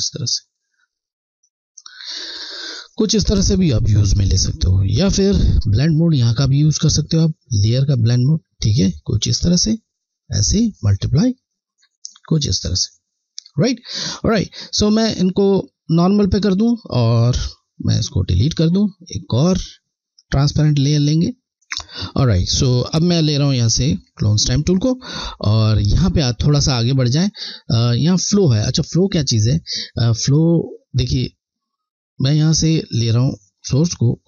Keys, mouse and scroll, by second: 2.1 scroll, 2.4 alt+scroll down 1, 7.5 click, 7.7 click, 10.8 click, 10.9 click, 11.6-13.4 scroll, 14.0 click, 23.1 click, 28.7 click, 28.9 scroll, 30.0 scroll, 33.5 click.